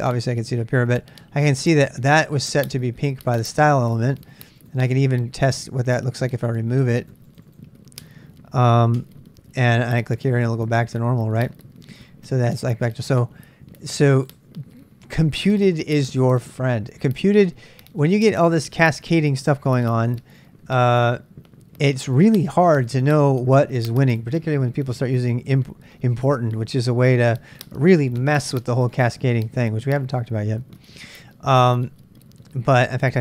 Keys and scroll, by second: 9.0 BackSpace.